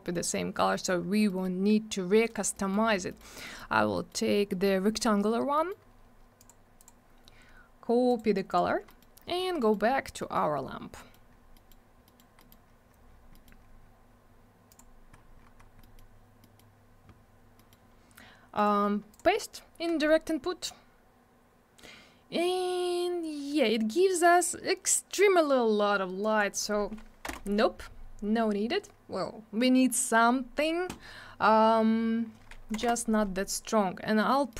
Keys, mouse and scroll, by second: 0.1 middle click, 0.1 middle click, 0.3 scroll up 1, 1.3 middle click, 1.4 middle click, 1.6 scroll up 1, 2.0-2.4 scroll down 1, 2.6 middle click, 2.7 middle click, 2.9-3.2 scroll down 2, 3.1 middle click, 3.2 double middle click, 3.5 middle click, 3.6 middle click, 3.7 scroll down 1, 4.0 middle click, 4.1 middle click, 4.3-5.0 scroll up 2, 4.5 middle click, 4.7 middle click, 5.6 middle click, 5.7 middle click, 5.8-6.2 scroll up 1, 6.4 click, 6.5 click, 6.8 click, 6.9 double click, 8.1 right click, 8.2 right click, 8.5 click, 8.6 double click, 8.9 middle click, 9.0 middle click, 9.2-9.7 scroll down 2, 9.6 middle click, 9.7 middle click, 9.9-10.2 scroll up 1, 10.2 middle click, 10.4 middle click, 10.5 scroll down 1, 11.0 middle click, 11.1-11.5 scroll down 2, 11.1 middle click, 11.6 middle click, 11.7 middle click, 12.1 middle click, 12.2 double middle click, 12.4 middle click, 12.5 middle click, 12.7-13.3 scroll up 1, 13.3 middle click, 13.5 middle click, 13.6-14.7 scroll up 1, 14.7 click, 14.8 click, 15.1-15.6 scroll down 1, 15.8 middle click, 16.0 middle click, 16.4 middle click, 16.6 middle click, 17.6 middle click, 17.7 middle click, 18.6 right click, 18.7 right click, 19.1 click, 19.2 click, 23.4-24.3 scroll up 1, 26.2 click, 26.4 click, 27.3 2, 27.3 Return, 28.5 scroll down 1, 32.8 5, 32.8 Return, 34.5 middle click.